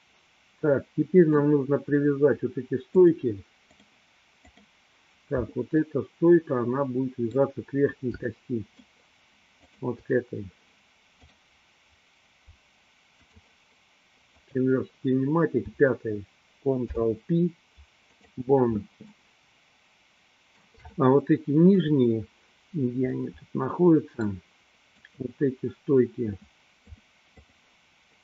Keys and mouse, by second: 0.0-1.6 middle drag, 3.0-3.9 drag, 4.6 click, 6.0-7.6 middle drag, 8.6-9.2 shift+middle drag, 9.8 shift+click, 11.3-13.6 drag, 14.6-15.1 drag, 16.7 ctrl+p, 19.3-22.1 middle drag, 23.2-24.4 middle drag, 25.2 click, 27.0 click.